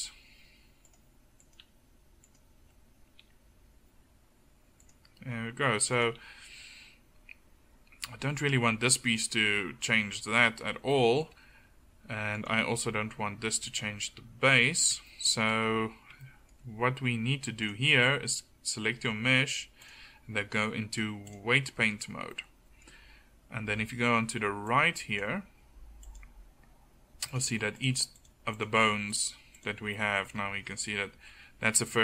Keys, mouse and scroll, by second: 0.0 r, 0.9-1.5 drag, 0.9-1.5 right drag, 1.7 r, 2.7-3.0 drag, 2.7-3.0 right drag, 3.3 r, 6.2 r, 12.5 r, 19.8 click, 30.0-32.0 drag.